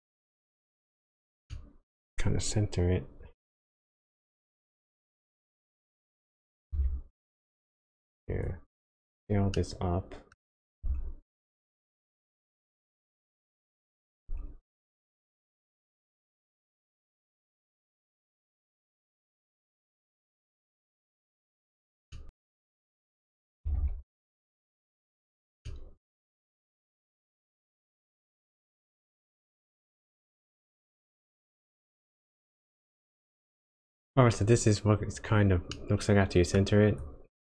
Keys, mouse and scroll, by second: 1.5 middle click, 2.1-3.1 scroll up 1, 3.3 KP_7, 5.2 g, 9.5 middle click, 10.8 s, 14.3 s, 18.8 middle click, 19.8 s, 22.1 middle click, 22.3-23.0 scroll up 1, 23.0 click, 23.6 g, 25.6 middle click, 29.0 click, 35.7 middle click, 36.8 click.